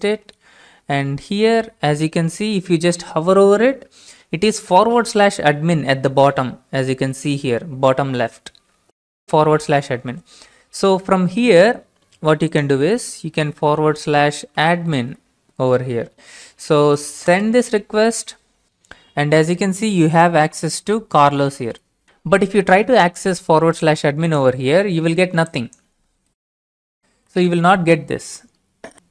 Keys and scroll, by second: 10.4 alt+Tab, 14.1-15.5 typing, 17.2 ctrl+space, 28.6 Return, 28.6 typing.